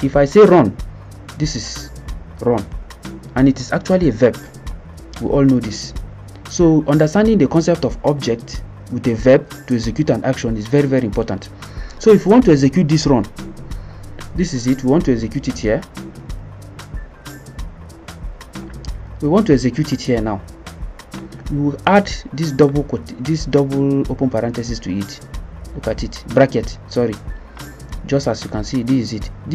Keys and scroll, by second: 15.6-16.4 typing, 17.7 Home, 17.9 Page_Up, 18.1 BackSpace, 18.4 -.